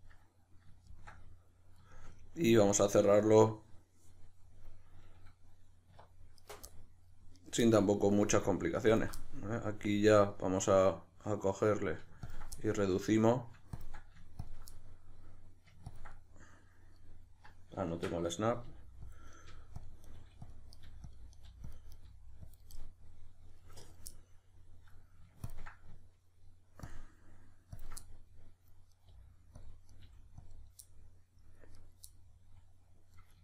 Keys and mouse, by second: 5.9 1, 6.4 right click, 6.4-7.4 middle drag, 7.4 right click, 7.5-8.3 middle drag, 8.3-9.2 ctrl+drag, 9.2-12.3 middle drag, 12.3-12.6 ctrl+drag, 12.6-13.7 middle drag, 13.7-14.7 ctrl+drag, 14.7-15.9 middle drag, 15.9 ctrl+click, 16.1-19.3 middle drag, 17.9 shift+Tab, 18.7-22.1 typing, 19.1 click, 19.3 right click, 19.9 click, 20.1-20.5 right drag, 20.5 click, 20.7 right click, 21.1 click, 21.3 right click, 21.7 click, 21.9 right click, 22.6 click, 22.7-23.8 middle drag, 23.8 right click, 24.1-25.5 middle drag, 25.5-28.0 ctrl+drag, 28.0-28.9 middle drag, 28.9 right click, 29.1 g, 29.7 click, 29.9 right click, 30.0 g, 30.5 click, 30.9-31.7 middle drag, 31.7 right click, 32.1-33.4 middle drag.